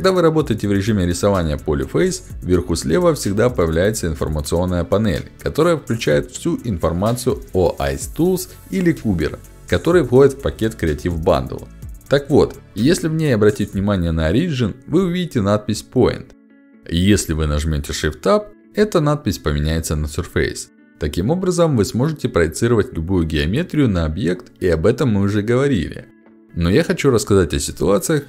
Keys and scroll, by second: 3.7 ctrl+alt+d.